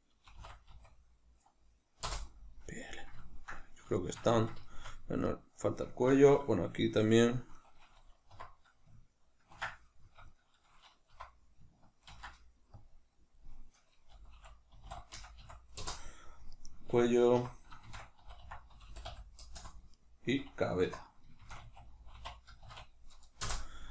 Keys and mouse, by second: 2.0 Return, 3.1 ctrl+middle click, 4.3 ctrl+shift+middle click, 5.2 right click, 7.5 right click, 8.2 F2, 10.2 right click, 11.0 F2, 16.5 right click, 17.3 F2, 19.8 right click, 20.7 F2, 23.7 middle click.